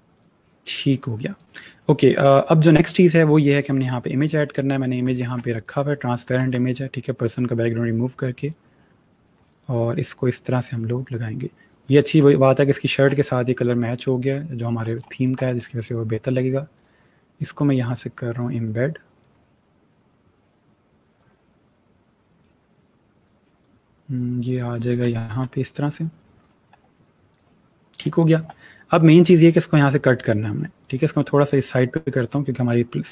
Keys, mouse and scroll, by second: 0.1 click, 3.6 click, 5.1 ctrl+c, 5.6 click, 6.3 ctrl+v, 7.2 click, 9.4 click, 13.5-13.8 alt+scroll up 1, 14.2-14.8 scroll up 1, 15.0 space, 15.0 click, 25.5-26.1 alt+scroll down 1, 26.1-26.9 scroll down 5, 27.2 click, 27.9 space, 28.0 click, 30.7 click.